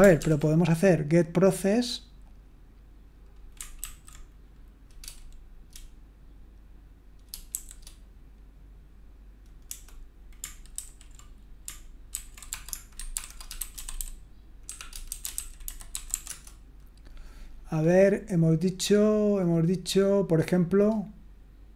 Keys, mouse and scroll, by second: 0.0 scroll up 1, 0.2 ctrl+p, 3.8 ctrl+a, 7.5 shift+g, 9.6 BackSpace, 10.8 ctrl+w, 12.1 ctrl+e, 12.5-16.6 typing.